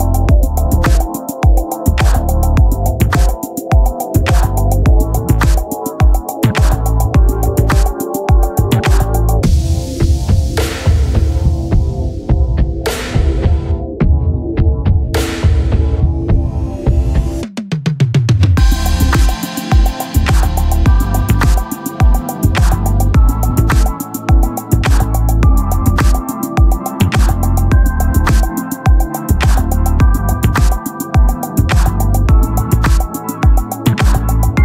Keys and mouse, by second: 8.8 click, 11.9 click, 18.8 ctrl+-, 22.9 click, 28.4 click, 29.9 click.